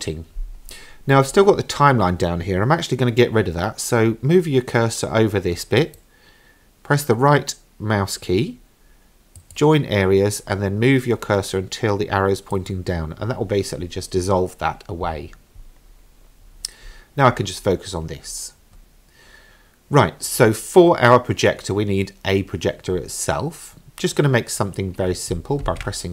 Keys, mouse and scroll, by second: 5.8-12.7 right drag, 15.9-16.8 scroll down 1, 16.8 scroll up 2, 17.3 scroll down 1, 18.2-20.7 scroll down 1, 25.7 shift+a.